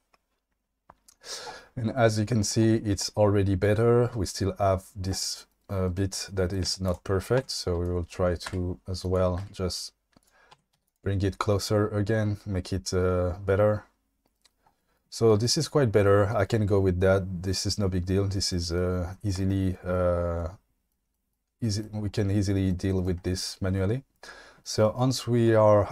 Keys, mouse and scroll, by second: 6.6 q, 7.4 Tab, 8.4 g, 9.0 click, 9.4 g, 10.2 click, 10.5 Tab, 10.7 q.